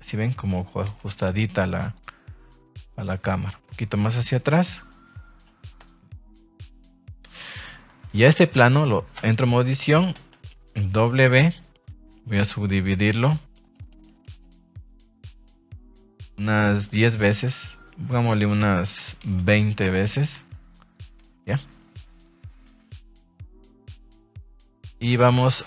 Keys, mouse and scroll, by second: 0.8 KP_3, 1.5-1.9 middle drag, 2.8 click, 4.2 KP_0, 5.8 a, 5.9 a, 6.8 shift+middle drag, 7.4 middle drag, 8.2 ctrl+s, 8.6 right click, 9.1 Tab, 9.6 a, 9.8 a, 10.1 a, 13.6 click, 13.7 click, 14.3 click, 14.5 click, 14.7 click, 14.9 click, 15.1 click, 15.6 click, 16.5 click, 16.8 click, 18.0-19.5 drag, 20.3 Tab, 20.7 middle drag, 21.1 a, 21.3 a, 21.5-22.2 middle drag, 22.3 middle click, 22.9 ctrl+s, 23.8 KP_1, 25.4 middle drag.